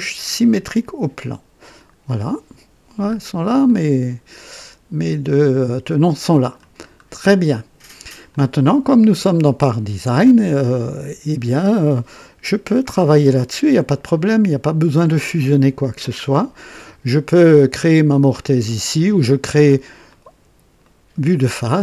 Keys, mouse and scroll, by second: 0.4 click, 1.7 click, 3.0 scroll up 1, 3.6-6.7 drag, 6.5 typing, 6.9 scroll down 1, 7.4 right click, 8.3 click, 9.3 right click, 10.2-12.0 drag, 12.7 typing, 15.8-17.7 drag, 18.6 click, 20.1 click, 20.8 right click.